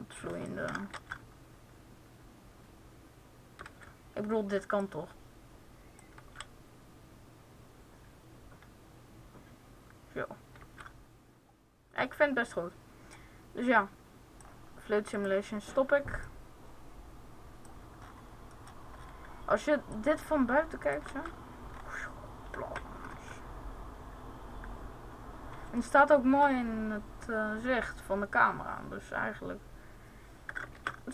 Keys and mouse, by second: 0.9 alt+a, 3.4 alt+a, 3.8 alt+a, 6.4 alt+a, 10.4 alt+a, 19.7-20.8 drag, 20.8 alt+a, 23.2 KP_0, 30.5 alt+a.